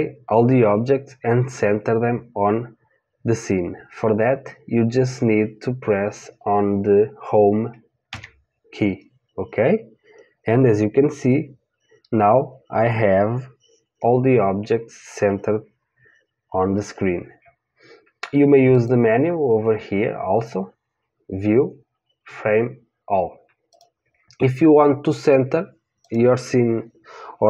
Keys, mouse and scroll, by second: 8.1 Home, 18.7 click, 23.7-27.4 drag.